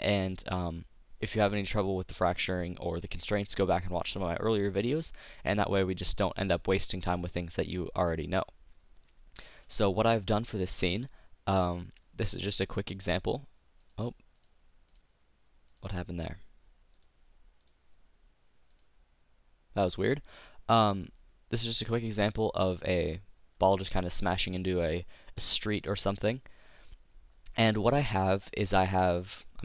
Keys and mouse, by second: 10.3-12.2 drag, 12.4-20.5 drag, 23.2 click, 23.9 middle click, 25.2-29.6 middle drag.